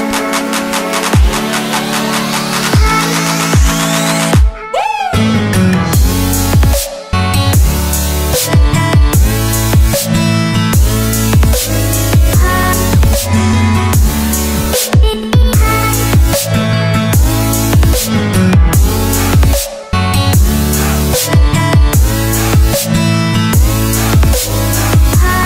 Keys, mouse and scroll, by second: 0.0 click, 0.7 Return, 1.7 click, 2.4 Return, 3.5 click, 4.1 scroll down 1, 4.2 click, 4.6 Delete, 4.9 click, 5.6 click, 6.6 Delete, 6.8 click, 8.2 click, 9.3 Delete, 9.5 click, 10.1 click, 11.5 Delete, 11.7 click, 12.7 click, 14.2 click, 15.3 Delete, 15.4 click, 16.2 click, 16.9 Return, 17.4 click, 19.1 click, 20.6 Return, 21.3 click, 22.6 click, 23.3 Return, 23.8 click.